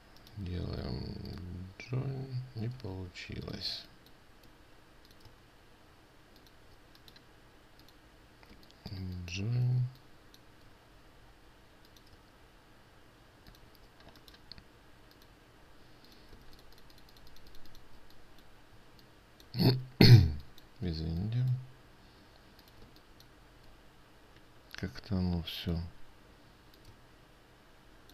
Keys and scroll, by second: 3.2 ctrl+z, 10.3 ctrl+space, 16.9 ctrl+space, 23.4 ctrl+space.